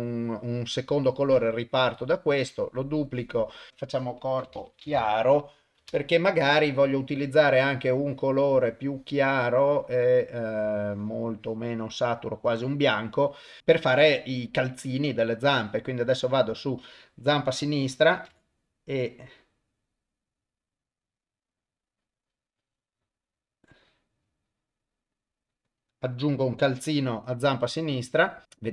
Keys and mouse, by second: 1.9 click, 2.3-5.8 drag, 6.9 click, 13.6 u, 13.6 y, 18.0-25.6 drag, 28.6 click.